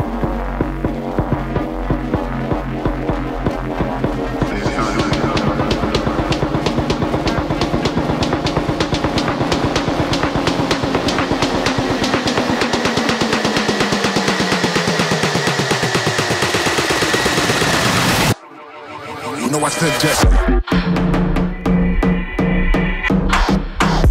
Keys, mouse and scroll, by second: 14.8 click, 20.4-22.5 click, 23.0 click, 23.1 click, 23.5 click.